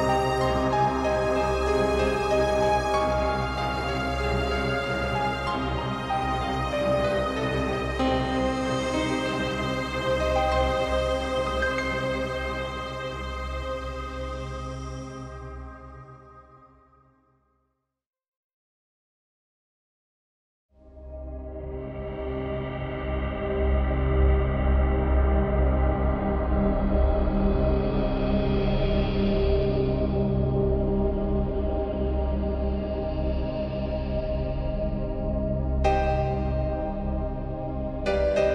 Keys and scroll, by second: 8.2 ctrl+t, 13.1 space, 15.1 ctrl+t, 18.9 ctrl+space, 22.6 space, 25.6 space, 31.6 ctrl+t, 37.2 ctrl+t.